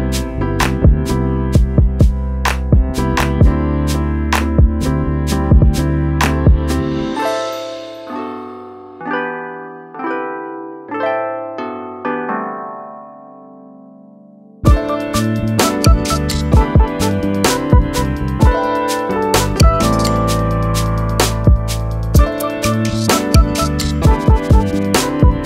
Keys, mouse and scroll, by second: 0.9 click, 5.4 right click, 6.6 click, 8.6 click, 12.6 click, 13.2 ctrl+a, 13.4 ctrl+g, 13.8 click, 14.6 right click, 14.8 click, 23.9 t, 24.2 click, 25.0-25.4 typing.